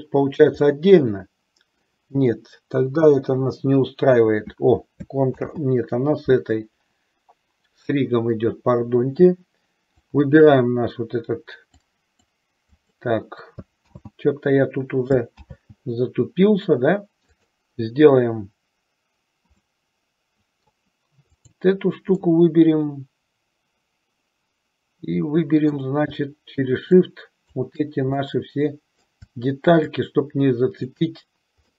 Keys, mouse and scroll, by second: 0.8-2.1 middle drag, 3.3 Delete, 5.5 ctrl+z, 10.3 click, 11.9 click, 12.9 click, 14.0 ctrl+z, 15.5 ctrl+z, 17.5 click, 19.7-20.9 middle drag, 21.5 click, 22.4-26.0 middle drag, 27.1 shift+click, 28.3 middle click, 30.1 shift+click.